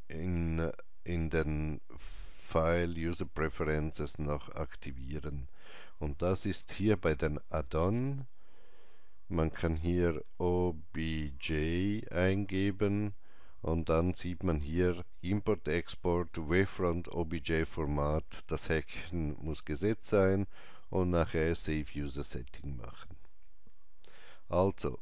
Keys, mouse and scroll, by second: 1.3 click, 6.7 click, 10.3-11.4 typing, 22.9 click, 23.0-23.7 typing.